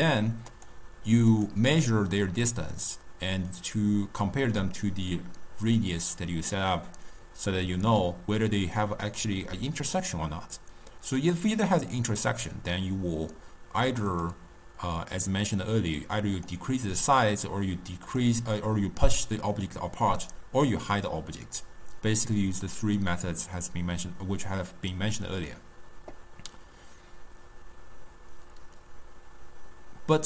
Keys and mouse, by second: 0.1 click, 0.6 click, 1.4 click, 14.2-16.5 drag, 18.2-20.3 drag.